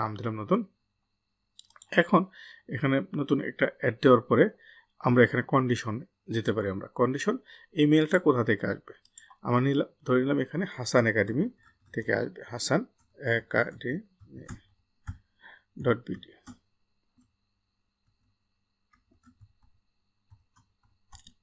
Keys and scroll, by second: 18.2-21.3 typing.